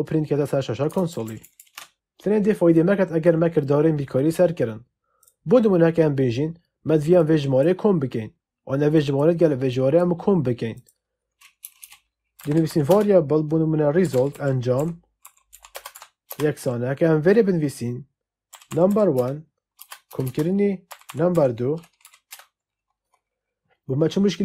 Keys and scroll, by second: 1.0 ctrl+shift+Left, 11.5 Return, 12.3-16.3 typing, 18.4-21.2 typing, 19.0 Return, 21.9 Down, 22.2 Return.